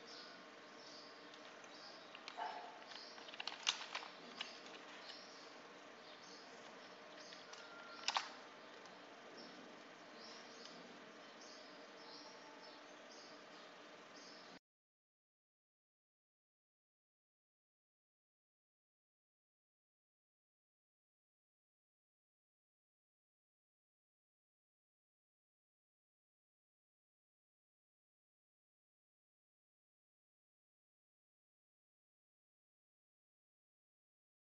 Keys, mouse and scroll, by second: 0.1 m, 0.3 Return, 0.9 click, 1.4 click, 2.0 click, 2.3 click, 2.5 click, 2.8 right click, 3.6 click, 3.7 click, 4.0 click, 6.1 click, 7.0 click, 7.2 click, 7.6 middle click, 8.9-9.7 typing, 8.9 click, 9.9 click, 10.1 click, 10.6 scroll up 2, 11.1-12.1 scroll down 4, 12.1 click, 12.8 click, 13.1 click, 13.5 click, 13.9 click, 14.1 5, 14.3 Tab, 14.5 3, 14.6 Return, 15.4 click, 16.4 1, 16.6 Return, 17.2 click, 18.1 8, 18.2 Return, 20.4 click, 20.5 click, 20.8 8, 20.9 Return, 21.5 click, 21.8 click, 22.0 a, 22.2 Return, 22.6 click, 23.0 click, 23.5 click, 23.7 i, 23.8 Return, 24.2 click, 24.4 click, 24.9 click, 25.9 click, 27.6-28.4 typing, 27.6 click, 28.5 click, 28.7 click, 29.0 click, 29.8 ctrl+click, 29.9 ctrl+d, 30.1 click, 30.9 click, 31.9 click, 32.1 click, 32.4-33.2 typing, 32.5 click, 33.2 click, 33.5 click, 34.3 click.